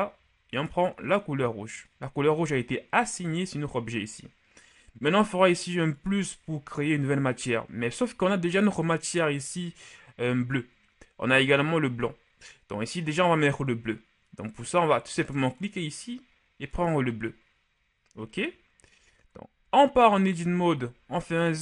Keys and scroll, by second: 19.6 Tab, 21.0 z.